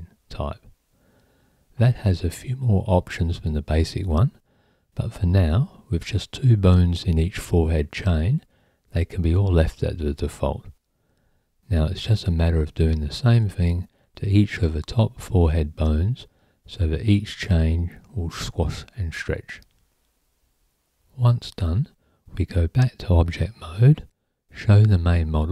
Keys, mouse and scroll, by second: 0.7 click, 1.9 click, 2.2-5.4 drag, 6.4 click, 7.3-9.3 drag, 10.6 click, 11.4-13.5 drag, 14.2 click, 15.1-18.0 drag, 20.0-21.9 drag, 23.0 click, 23.7 Tab.